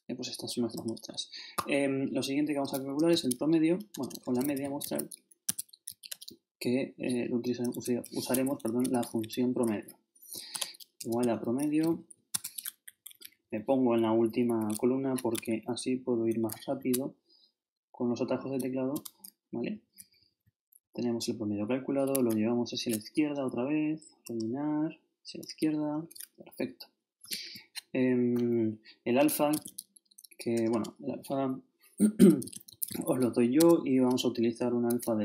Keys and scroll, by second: 2.7-6.0 typing, 5.4 shift+Tab, 8.3 shift+Home, 8.8 shift+Right, 10.5-12.5 typing, 12.9 shift+Down, 15.3 shift+super+Down, 17.3 shift+Up, 18.9 shift+Return, 19.7 shift+Down, 20.4 shift+super+Up, 20.8 shift+super+Down, 21.7 shift+Down, 22.4 shift+Left, 26.4 shift+Down, 27.2 shift+super+Down, 27.3 shift+super+Left, 29.3-30.5 typing, 32.2-33.4 typing, 33.6 shift+Tab, 35.0-35.2 typing.